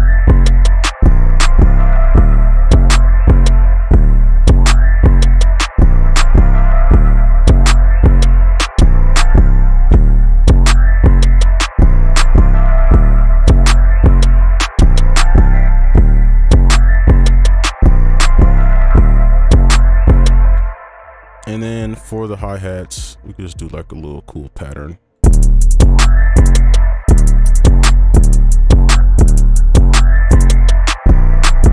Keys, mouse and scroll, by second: 3.7 space, 3.9 space, 7.0 double click, 9.9 space, 11.4 right click, 14.3 double click, 15.9 space, 20.5 space, 25.2 space, 26.9 space, 27.0 space, 27.8 space, 28.0 right click, 28.1 right click, 29.1 space, 29.1 space, 31.4 space, 31.6 space.